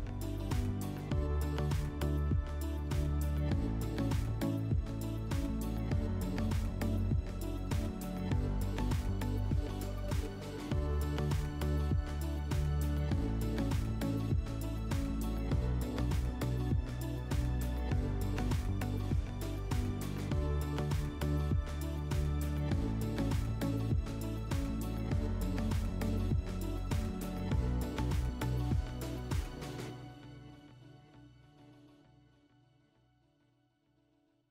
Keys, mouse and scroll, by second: 1.0-2.6 drag, 2.9-4.5 drag, 5.8-7.4 drag, 10.9 click, 12.4 4, 14.6 click, 16.0 click, 16.1 click, 16.7-17.5 typing, 18.1 Return, 19.4 click, 20.7 typing, 22.5 F4, 26.2 click, 26.7 click, 28.6 alt+F4, 32.5 click.